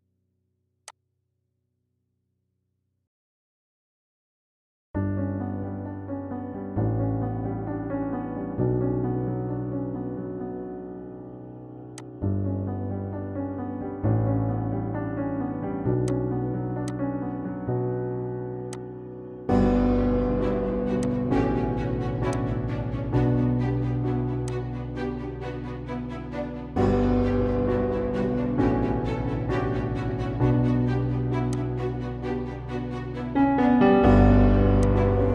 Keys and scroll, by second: 6.6 Up, 8.7 Right, 9.6 Down, 10.5 Up, 10.9 Left, 32.9 ctrl+i.